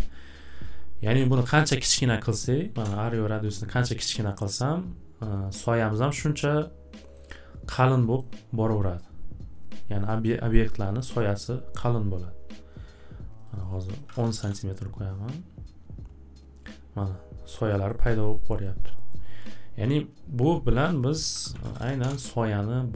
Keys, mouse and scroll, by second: 0.4 click, 0.6 click, 0.9-1.8 typing, 2.8 Return, 7.3 scroll, 8.2 scroll, 9.0-9.3 scroll, 11.2 scroll, 11.8-12.1 scroll, 13.4 click, 13.6 click, 13.8 click, 13.8-14.6 typing, 14.0 click, 14.1 scroll, 17.5-17.8 typing, 17.9 scroll, 18.8-19.4 scroll, 19.6-22.1 typing, 20.9 click, 21.1 click.